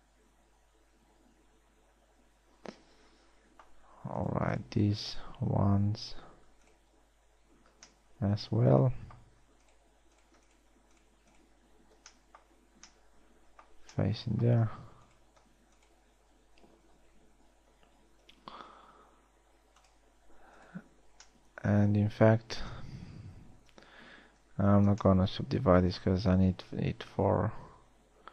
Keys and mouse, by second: 7.9 f, 12.2 f, 19.3 w, 24.3 ctrl+z, 24.9 ctrl+z, 27.7 ctrl+r.